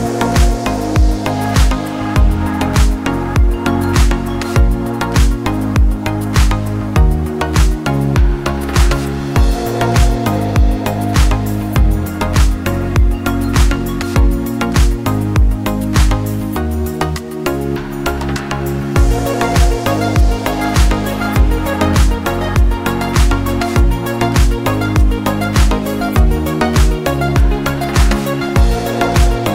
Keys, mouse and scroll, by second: 0.7 click, 4.5 scroll down 1, 5.5 click, 13.3 click, 14.8 scroll up 1, 15.4 click, 18.3 click, 26.3 click, 27.9 click.